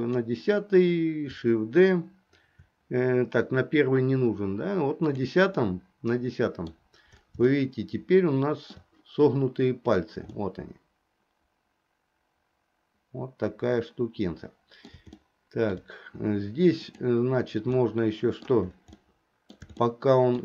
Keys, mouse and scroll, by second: 5.2 click, 5.7-6.9 middle drag, 7.6-8.9 shift+middle drag, 10.5-15.2 middle drag, 15.4 shift+middle click, 16.9 click, 17.8 middle click, 19.1 middle click, 19.9 shift+middle click.